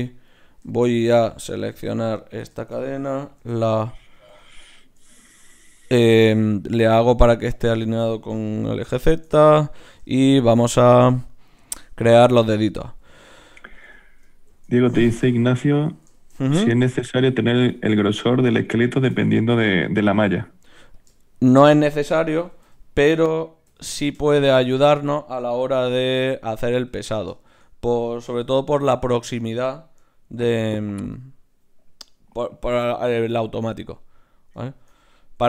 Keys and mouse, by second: 3.4 ctrl+n, 6.9-9.8 middle drag, 9.8 right click, 14.5 shift+d, 15.7 KP_1, 16.6 s, 19.1 KP_7, 20.6 g, 22.4 s, 25.8 g, 26.8 g, 28.5 s, 30.3 ctrl+alt+s, 34.2-35.3 middle drag.